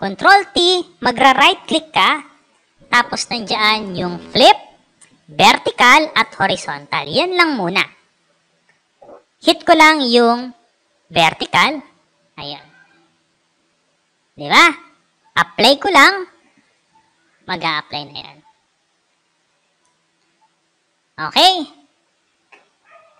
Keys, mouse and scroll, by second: 0.4 right click, 11.4 click, 14.2 click, 15.8 click, 16.6 click, 19.3 click.